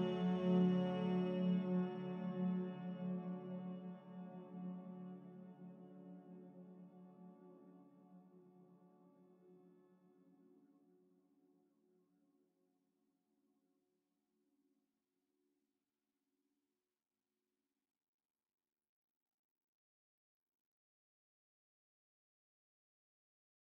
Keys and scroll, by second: 0.6 ctrl+z, 5.3 ctrl+z, 14.8 ctrl+z.